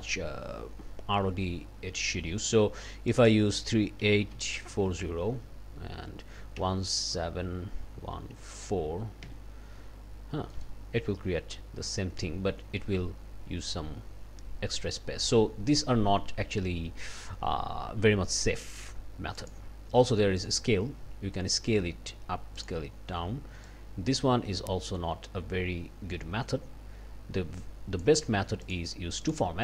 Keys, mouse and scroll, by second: 3.1 click, 4.0 KP_3, 4.3 KP_8, 4.7 KP_4, 4.8 KP_0, 5.8 Tab, 6.6 KP_1, 7.1 KP_7, 8.0 KP_1, 9.2 KP_Enter, 10.2 scroll down 2, 10.5 click, 19.4 click, 20.4 click, 22.6 click, 23.7-28.2 drag, 28.6 click, 29.2 click.